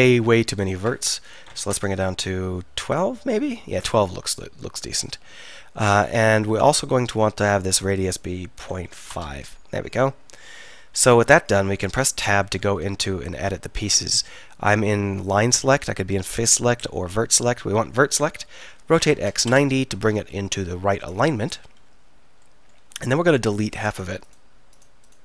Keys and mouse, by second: 9.9-12.0 middle drag, 12.0 Tab, 17.3 a, 18.0-19.2 middle drag, 18.3 r, 21.6 KP_1.